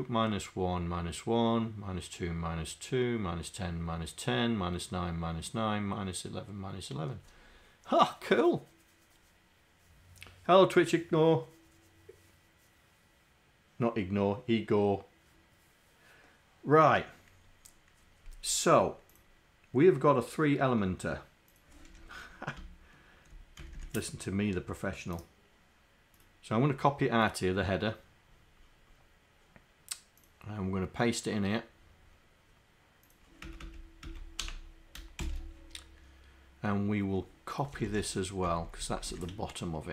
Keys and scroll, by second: 21.9 Home, 22.6 shift+Down, 23.7 shift+Down.